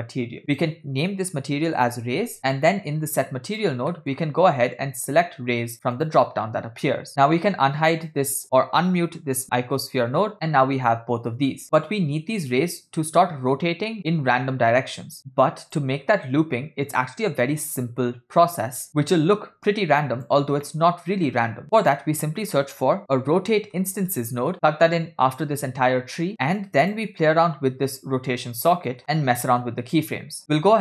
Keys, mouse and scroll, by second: 0.5-2.4 drag, 3.5 click, 4.1 middle click, 4.3-4.7 scroll up 4, 5.0-6.2 drag, 7.3 middle click, 7.3 scroll down 4, 8.0 click, 9.8 m, 10.5 middle click, 11.8-12.4 scroll down 4, 14.9 middle click, 15.2-15.9 drag, 18.9 shift+click, 19.2-20.4 drag, 20.8 middle click, 21.2 scroll up 3, 21.8 shift+a, 26.5 scroll up 3, 26.7 click, 29.1 middle click.